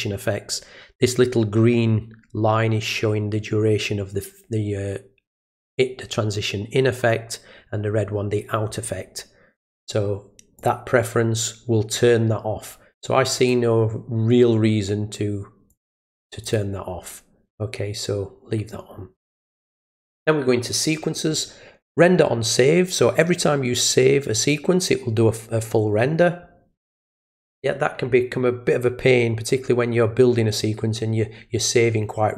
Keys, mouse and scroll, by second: 9.6 click, 10.6 click, 13.4 click, 15.7 click, 16.4 click, 20.0 click.